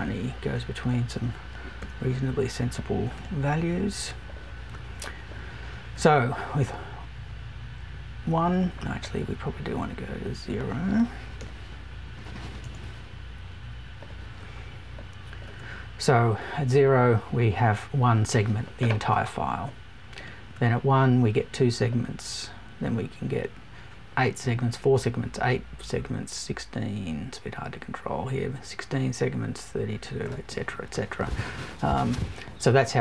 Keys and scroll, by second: 12.6 BackSpace.